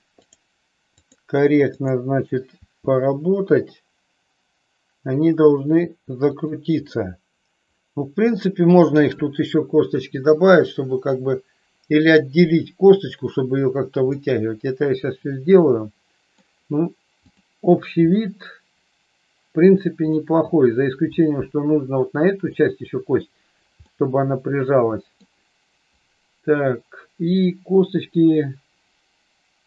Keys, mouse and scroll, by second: 0.2 click, 0.9 click, 2.7 r, 6.8-8.4 middle drag, 14.1-16.3 middle drag, 17.3 click, 18.1-19.6 middle drag, 22.5 middle click, 23.9-25.2 middle drag.